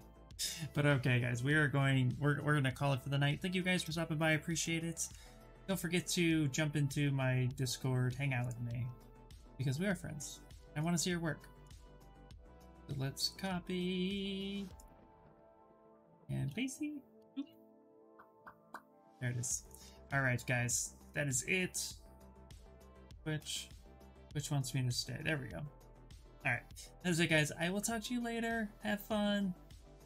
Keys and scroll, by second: 16.8 Return, 22.4 ctrl+v, 23.0 Return.